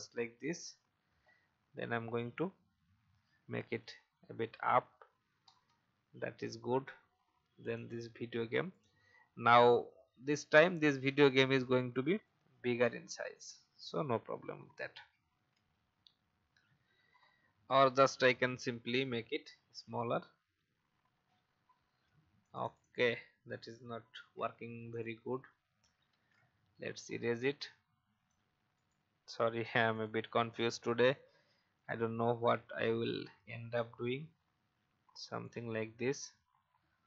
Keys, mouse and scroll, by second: 1.9-2.5 Up, 5.7 Up, 5.8 Up, 5.9 Up, 7.7 click, 9.4 right click, 10.3 click, 11.3 shift+click, 13.6 shift+click, 15.5 shift+Up, 15.7 shift+Up, 15.9 shift+Up, 16.4 shift+Up, 16.4 shift+Up, 17.9 click, 19.5-20.1 shift+scroll down 1, 22.4 click, 24.1 ctrl+c, 24.9 click, 25.6 Delete, 26.1 ctrl+v, 27.3-28.7 drag, 28.7-29.8 right drag, 29.9 click, 30.4-31.4 alt+scroll up 1, 31.7-32.8 shift+drag, 33.7-35.4 shift+drag, 36.2-36.8 shift+Up.